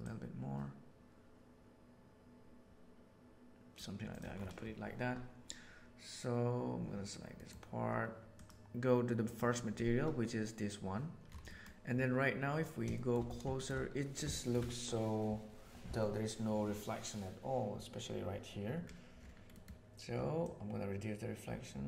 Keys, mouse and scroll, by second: 4.0 middle click, 7.3 middle click, 8.3 click, 11.5 middle click, 12.9 shift+middle drag, 13.5 shift+middle click, 14.3 shift+middle click, 20.3-21.8 drag.